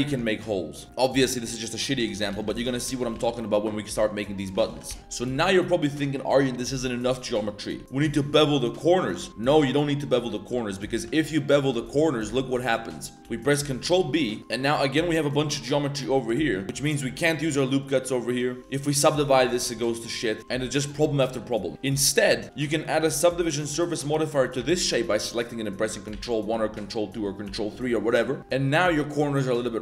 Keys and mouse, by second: 0.0 Tab, 0.1-0.8 drag, 0.9 Tab, 1.9 Tab, 2.3 ctrl+z, 2.4 ctrl+z, 2.7 ctrl+z, 2.8 ctrl+z, 3.0 ctrl+z, 3.1 ctrl+z, 3.2 ctrl+z, 3.5 middle drag, 4.3 middle drag, 4.6 ctrl+z, 4.7 ctrl+z, 4.9 ctrl+z, 5.0 a, 5.0 a, 5.2 shift+click, 5.4 a, 5.5 drag, 5.9 Tab, 6.0 click, 6.3 drag, 6.8 click, 7.8 2, 8.7 shift+click, 9.3 ctrl+z, 9.3 middle drag, 10.3 middle drag, 10.7 middle drag, 11.3 shift+click, 11.6 shift+middle drag, 11.9 drag, 12.1 middle drag, 12.6 middle drag, 12.8 shift+middle drag, 13.0 middle click, 13.2 ctrl+b, 14.4 middle click, 14.4 1, 15.2 click, 15.8 click, 16.4 shift+click, 16.6 ctrl+r, 17.3 ctrl+r, 18.6 Tab, 18.6 ctrl+1, 18.8 ctrl+2, 19.6 middle click, 19.9 shift+middle drag, 20.2 middle drag, 20.4 ctrl+z, 20.5 ctrl+z, 21.0 click, 21.3 2, 21.7 Tab, 23.2 ctrl+1, 23.7 ctrl+2, 24.2 middle click, 24.6 ctrl+1, 24.9 middle click, 26.1 ctrl+1, 26.5 ctrl+2, 27.1 ctrl+middle click, 27.4 ctrl+3, 28.4 Tab, 28.5 middle click.